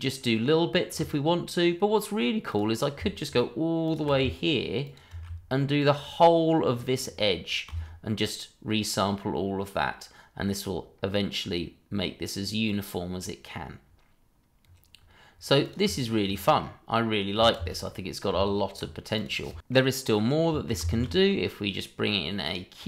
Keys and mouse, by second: 1.0 click, 2.5 click, 3.8 ctrl+click, 4.8 shift+click, 5.8 ctrl+click, 15.6 shift+click, 16.2-16.6 middle drag, 17.5 space, 17.9 middle click, 18.3 Tab, 19.1 click, 19.7-20.4 middle drag, 20.9 shift+a.